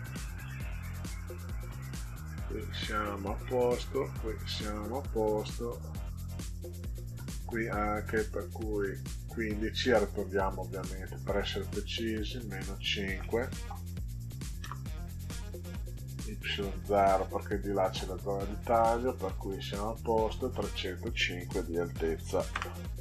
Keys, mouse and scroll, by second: 0.1 middle click, 2.9-4.2 drag, 5.7 click, 8.4 click, 9.9 click, 10.9 Delete, 11.7 click, 12.4 Delete, 14.2 5, 14.6 Return, 20.1 click, 22.5 Return.